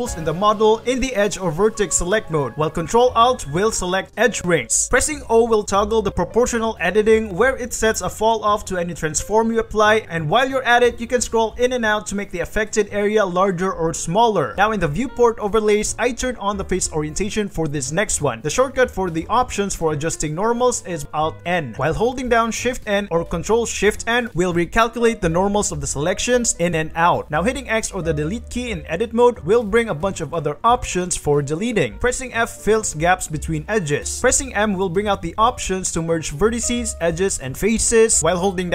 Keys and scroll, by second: 5.3 o, 6.1 g, 8.4 r, 14.8 alt+Tab, 17.8 3, 21.0 alt+n, 22.5 shift+n, 23.9 ctrl+shift+n, 25.0 shift+n, 26.1 ctrl+shift+n, 26.2 a, 26.6 shift+n, 27.5 ctrl+shift+super+n, 28.1 3, 28.7 shift+x, 30.2 ctrl+z, 30.2 x, 32.7 alt+2, 32.9 alt+f, 33.6 alt+2, 34.0 alt+f, 34.8 shift+m, 36.3 shift+m, 38.3 shift+m.